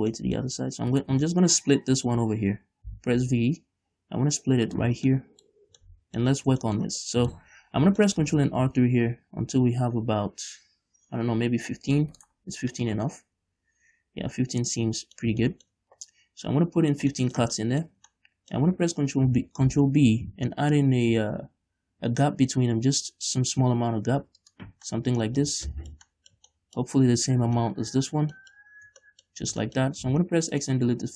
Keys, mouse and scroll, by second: 1.1 right click, 1.5 shift+middle click, 3.1 v, 5.0 shift+click, 5.2 scroll down 2, 5.8-8.8 middle drag, 6.6 scroll up 2, 7.7-8.3 scroll up 2, 8.8 ctrl+r, 12.5 right click, 13.0-24.7 middle drag, 19.5 ctrl+b, 24.7 shift+click, 25.1-27.2 middle drag, 27.2-27.9 scroll up 2, 27.9 shift+middle click, 28.4 scroll down 2, 28.9 scroll up 1, 30.2 x.